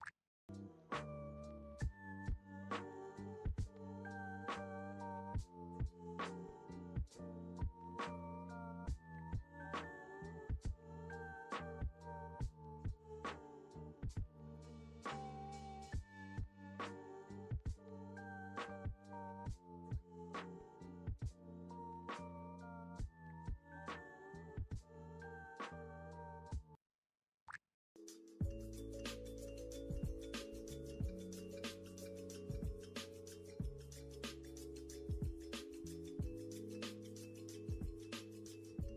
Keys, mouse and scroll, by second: 0.3 click, 0.7 Escape, 1.0 click, 1.3 click, 1.9 click, 2.8 click, 3.0 click, 3.4 click, 3.9 Escape, 4.1 click, 4.2 click, 4.5 click, 4.6 Escape, 4.7 scroll, 4.9 click, 5.2 click, 5.6 click, 5.8-6.1 scroll, 6.1 click, 6.4 click, 6.8 click, 7.5 click, 8.1 click, 8.3 click, 8.5 scroll, 8.6-9.2 scroll down 10, 10.1 Escape, 10.2 click, 10.5 Escape, 10.6 scroll, 12.1-13.0 scroll, 13.4 click, 13.5 Escape, 13.8 scroll down 9, 14.5 click, 14.6 Escape, 15.3 click, 16.2 click, 16.3 click, 16.6 click, 16.7 click, 17.3 click, 18.2 click, 18.4 click, 19.1 click, 19.5 click, 19.7 click, 20.3 click, 21.4 click, 21.4 click, 22.0 click, 22.3 click, 22.5 click, 23.0 click, 24.9 click, 25.6 click, 25.7 click, 25.9 click, 26.0 click, 26.4 click, 27.2 click, 27.4 click, 27.7 click, 28.5-29.2 drag, 29.9 click, 30.5 click, 31.1 click, 32.0 click, 32.8 click, 33.1 click, 33.1 scroll down 5, 33.8 click, 34.0-34.6 scroll, 34.9 click, 35.1-35.7 scroll, 36.1 click, 36.2-37.5 scroll, 36.5 click, 38.2 click, 38.4-38.9 scroll.